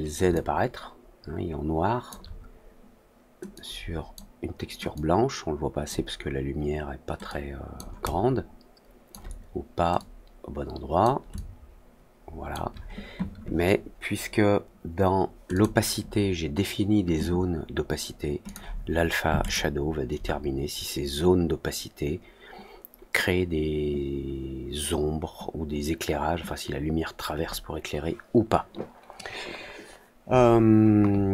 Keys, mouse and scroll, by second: 0.2-2.0 alt+drag, 3.5-4.1 drag, 4.9-5.8 drag, 7.2 click, 8.0-9.0 alt+drag, 9.9-10.9 drag, 11.3-12.4 alt+drag, 15.4 click, 18.4 click, 19.4 click.